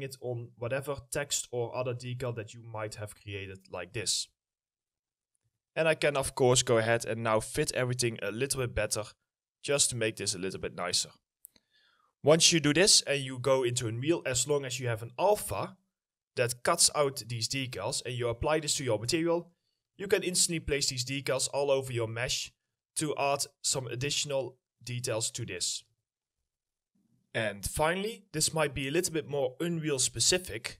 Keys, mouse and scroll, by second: 2.2 ctrl+click, 4.5 right click, 5.9 2, 9.0 w, 11.3 middle click, 11.4-13.4 scroll down 1, 13.4 scroll down 1, 19.4 right click, 22.3 right click, 22.3 a, 23.8 right click, 25.6-26.4 typing.